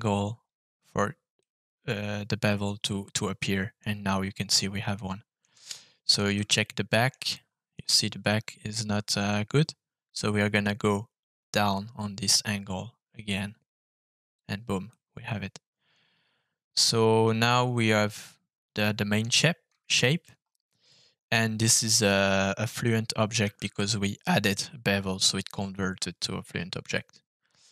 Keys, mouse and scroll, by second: 1.3-3.7 middle drag, 4.9 middle click, 5.9 shift+middle click, 6.5 middle click, 7.3 shift+middle click, 11.7-14.4 drag, 14.8-19.2 middle drag, 19.8-21.0 scroll down 2, 21.0-21.7 scroll up 2, 23.4 f.